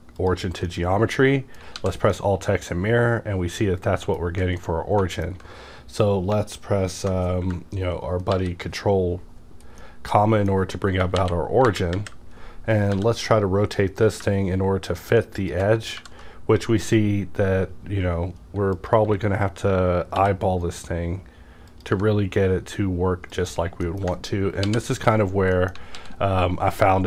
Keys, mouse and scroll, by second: 0.1 click, 0.6-2.1 middle drag, 1.7 alt+x, 2.3 alt+x, 2.3-9.6 middle drag, 8.3 ctrl+., 9.6 scroll down 1, 9.8-11.1 middle drag, 10.9 KP_Enter, 11.1 KP_1, 11.6 KP_3, 11.6 KP_1, 11.9 KP_5, 12.6-12.9 scroll up 1, 12.9 r, 15.2 scroll up 1, 15.2 r, 15.4 ctrl+click, 15.9 g, 18.7 click, 19.0 e, 20.1 r, 21.7 click, 21.9 g, 23.3 click, 23.8 middle click, 24.6 ctrl+., 25.5 middle click, 25.9 alt+x.